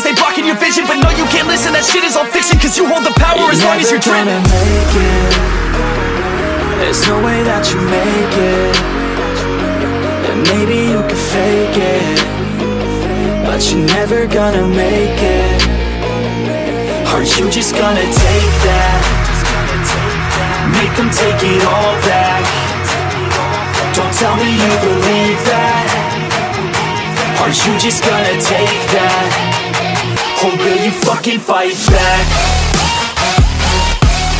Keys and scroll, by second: 0.2 F9, 1.6 ctrl+u, 6.4 ctrl+z, 14.0 ctrl+j, 14.6 ctrl+u, 18.2 ctrl+j, 19.6 ctrl+j, 20.1 ctrl+e, 20.5 ctrl+u, 22.9 ctrl+u, 29.2 ctrl+d, 33.3 ctrl+e.